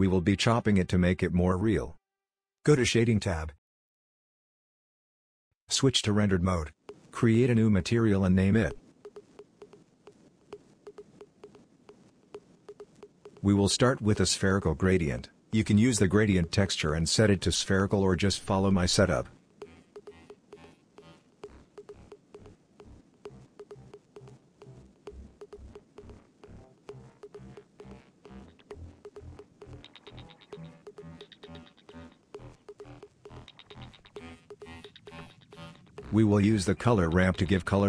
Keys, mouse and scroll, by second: 1.4 KP_Divide, 2.1 click, 2.3 middle click.